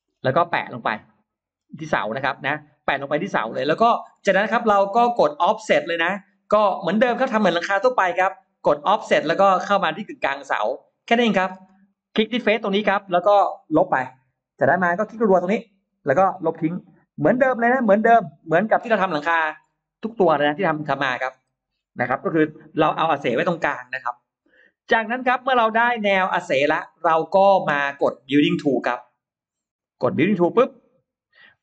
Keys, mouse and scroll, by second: 0.7-1.9 scroll up 3, 6.4 click, 8.0-8.3 scroll up 1, 9.6 f, 10.0 click, 10.8 click, 11.4 space, 11.5 middle click, 11.5 scroll up 1, 11.6 space, 12.2 click, 14.2 Delete, 15.4 click, 15.6 click, 18.2 Delete, 18.7-19.8 scroll down 3, 20.0 middle click, 20.3-20.9 scroll up 1, 25.8 click, 26.0 click, 26.6-27.3 scroll down 2, 27.1 middle click, 27.3 middle click, 28.8 click, 29.6 click, 30.4 click.